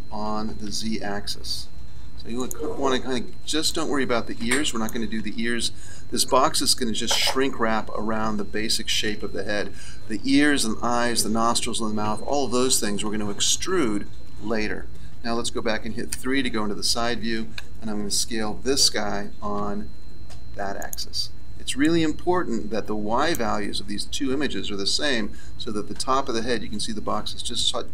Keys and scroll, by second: 0.2 s, 16.1 KP_3, 18.4 s.